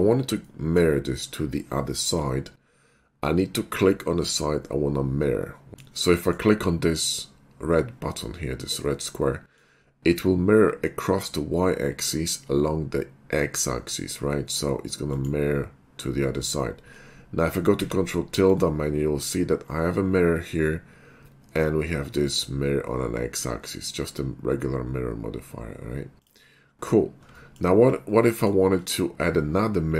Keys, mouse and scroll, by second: 0.6 middle click, 5.7 alt+x, 5.7 middle click, 6.2 middle click, 9.2 middle click, 15.2 click, 17.8 ctrl+`, 18.5-19.2 drag, 26.2 click, 27.4 middle click, 28.3 middle click.